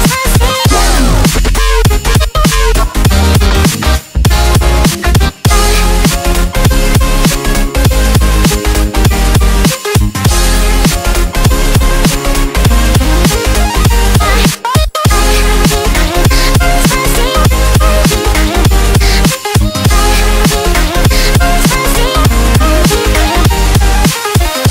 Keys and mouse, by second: 0.0-6.1 typing, 7.6-11.0 typing, 16.3 click, 18.9-22.3 typing.